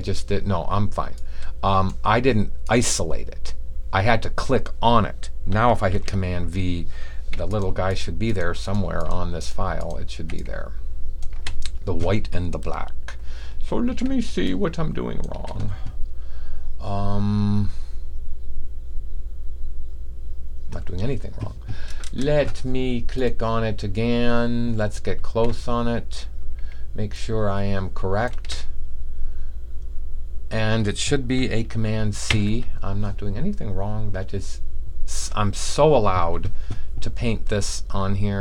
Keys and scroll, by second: 5.8 super+v, 10.1 super+v, 11.4 super+v.